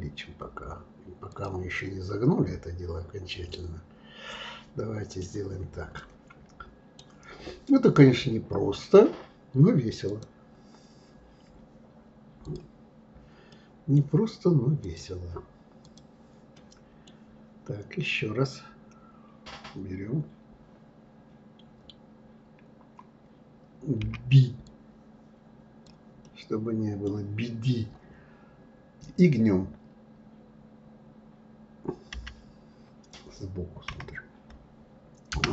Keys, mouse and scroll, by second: 1.7-4.8 middle drag, 5.9-8.9 middle drag, 10.0 click, 12.4 click, 13.5-14.8 middle drag, 14.8-16.5 drag, 16.5-19.6 middle drag, 26.2-29.2 middle drag.